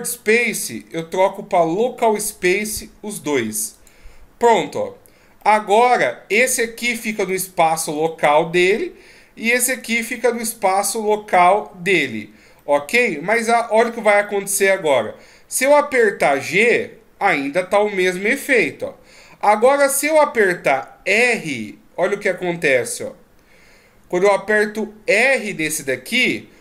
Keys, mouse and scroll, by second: 2.2 click, 4.8 scroll down 1, 5.4 middle click, 6.3 right click, 7.2 right click, 8.0 right click, 9.8 right click, 12.6 middle click, 14.3 middle click, 16.4 g, 21.2 r.